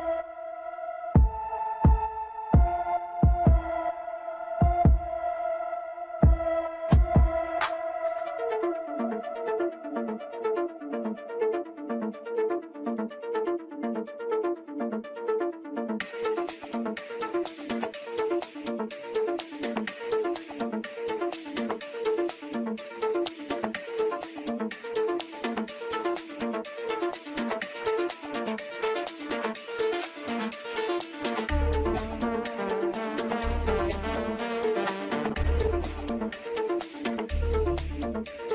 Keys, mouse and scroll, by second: 2.5-5.9 drag, 8.6-11.7 drag, 12.3 click, 18.8-22.3 drag, 22.3 KP_0, 27.8-32.8 drag.